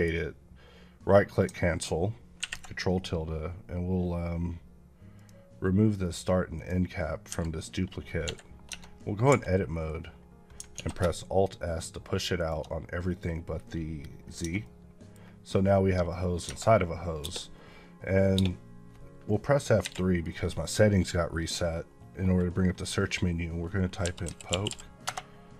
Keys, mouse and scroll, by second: 5.0 click, 8.6 Tab, 8.7 scroll up 2, 9.1 a, 10.1-10.4 scroll down 1, 10.6 alt+s, 12.2 shift+click, 14.1 scroll down 1, 14.3 Tab, 14.5 middle click, 15.9 middle click, 16.3 Tab, 17.1 space, 23.9-24.5 typing, 24.9 Return.